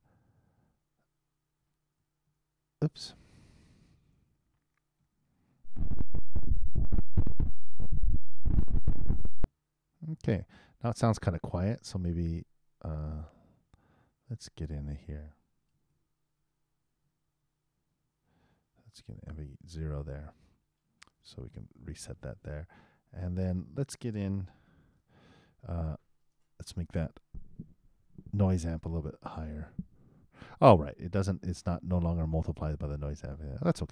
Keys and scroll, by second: 2.2 super+Return, 4.0 super+Return, 5.6 super+Return, 15.7 super+c, 17.2 super+v, 21.2 super+0, 21.5 super+Return.